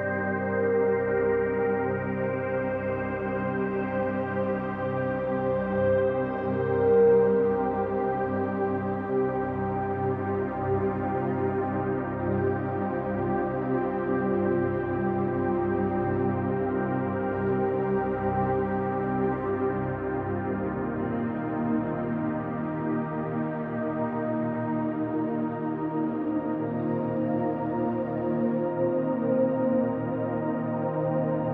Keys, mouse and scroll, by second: 0.1 middle click, 0.6-1.7 drag, 1.7 f, 1.9-4.3 drag, 4.3 f, 4.5 middle click, 5.2-6.8 drag, 6.8 f, 7.3 click, 8.3-11.4 middle drag, 9.0 f, 11.4 click, 12.4 f, 13.6 click, 13.8-20.8 middle drag, 15.1 f, 17.3 KP_1, 18.1-18.9 scroll up 2, 19.1-20.4 scroll up 2, 20.4-20.8 scroll up 1, 20.8 click, 22.3 e, 24.8-27.1 middle drag, 27.1-28.5 drag, 28.5 f, 28.8 click, 29.6 f, 29.9-31.5 middle drag.